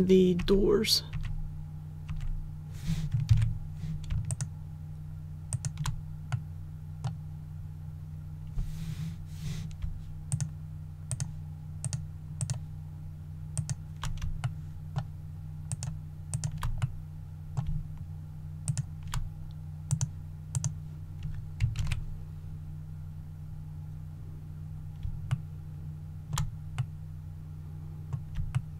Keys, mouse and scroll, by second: 0.4-2.1 typing, 3.3 ctrl+z, 4.3 shift+right click, 5.5 shift+right click, 6.3 middle click, 7.5-9.8 scroll up 1, 10.3 shift+right click, 11.1 shift+right click, 11.8 shift+right click, 12.4 shift+right click, 13.5 shift+right click, 14.3 shift+scroll up 1, 14.4 shift+middle click, 15.7 shift+right click, 16.3 shift+right click, 16.8 middle click, 17.7-18.1 shift+scroll down 1, 18.6 shift+right click, 18.8 shift+scroll up 1, 18.8 shift+scroll down 1, 19.9 click, 21.8 alt+a, 23.0-25.0 scroll down 1, 25.3 shift+middle click, 26.8 middle click, 28.5 shift+middle click.